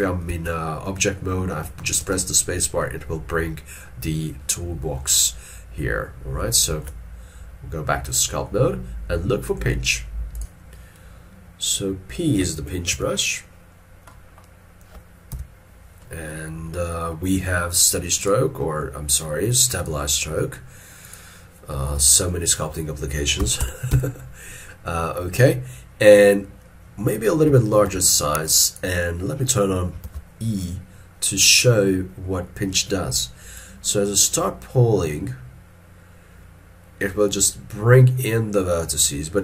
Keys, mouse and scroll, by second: 0.4 ctrl+Tab, 6.8 ctrl+Tab, 15.4 p, 16.1 middle click, 23.5 1, 24.0 Return, 27.9 f, 30.1 alt+e.